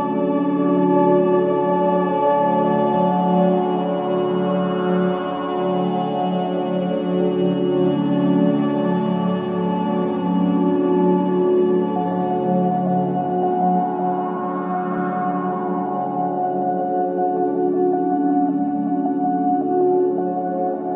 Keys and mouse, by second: 3.2-4.4 drag, 4.4 Tab, 5.2-14.4 right drag, 14.4 Tab, 16.6 click, 20.0 click.